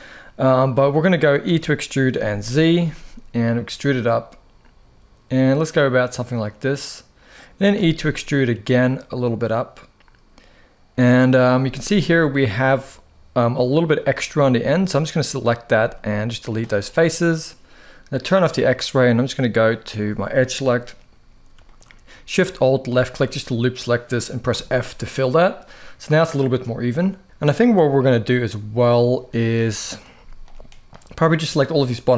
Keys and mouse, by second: 1.1 e, 1.8 z, 2.5 z, 7.0 click, 7.4 e, 10.7 click, 11.3 z, 12.0 shift+middle click, 13.3 middle click, 13.8 shift+middle click, 14.5 click, 15.5 x, 16.5 middle click, 20.1 middle click, 21.3 shift+middle click, 24.2 f, 25.3 middle click, 26.3 shift+middle click, 27.2 KP_1, 29.6 click, 29.9 z, 30.7 click, 31.6 shift+middle click, 32.0 g.